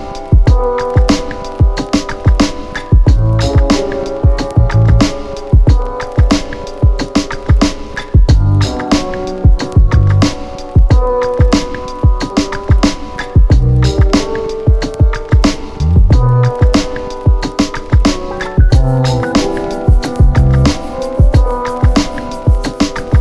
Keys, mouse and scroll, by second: 1.1 Return, 2.7 z, 4.0-6.6 click, 12.5 Return, 16.1 click, 17.5 click, 20.5 Return, 21.8-23.2 click.